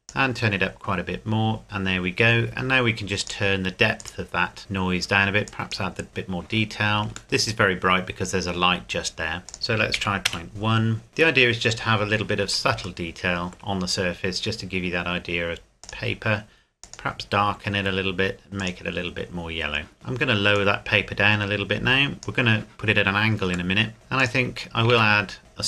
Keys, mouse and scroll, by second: 3.2 click, 5.9 click, 7.2 shift+middle click, 7.8 scroll up 1, 9.5 click, 9.7 KP_Decimal, 9.9 KP_1, 10.3 KP_Enter, 13.1 shift+middle click, 15.8 click, 19.9 middle click, 20.6 click, 23.7 middle click, 23.9 click, 24.5-24.9 scroll down 1, 25.1 shift+a, 25.4 click.